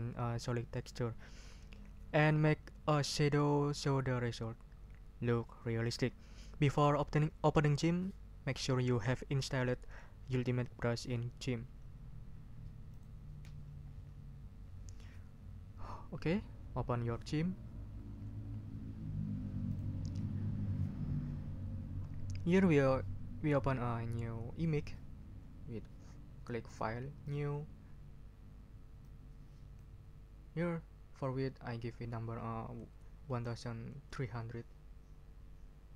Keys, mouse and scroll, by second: 12.9 click, 19.7 click, 26.6 click, 27.2 click, 29.0 click, 33.3 1, 34.0 3.